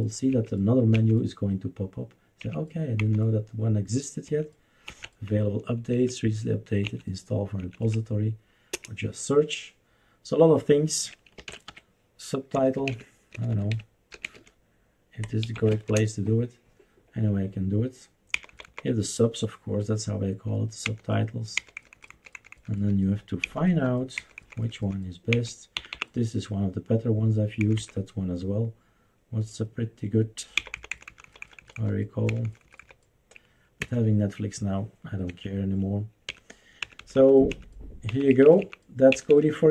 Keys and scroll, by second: 0.3 Up, 0.9 Left, 2.4 Up, 3.0 Down, 4.3 Right, 4.9 Right, 5.9 Right, 7.0 Right, 7.6 Right, 7.8 Right, 8.7 Return, 11.1-16.2 typing, 18.3 Down, 18.5 Down, 18.6 Down, 20.8 Down, 21.5 Down, 21.8 Down, 21.9 Down, 22.1 Down, 22.4 Down, 22.5 Down, 22.7 Down, 23.4 Down, 23.7 Down, 24.2 Down, 24.4 Down, 24.6 Down, 24.8 Down, 25.3 Down, 25.7 Up, 25.9 Up, 27.6 Down, 27.8 Down, 30.6 Down, 30.7 Down, 30.9 Down, 31.1 Down, 31.4 Down, 31.6 Down, 31.8 Down, 32.3 Down, 32.4 Down, 32.6 Down, 32.8 Down, 33.8 Escape, 35.3 Escape, 36.3 Left, 36.8 Left, 37.0 Left, 37.1 Left, 37.5 Left, 38.1 Up, 38.3 Up, 38.4 Up, 38.6 Up, 39.1 Up, 39.3 Up.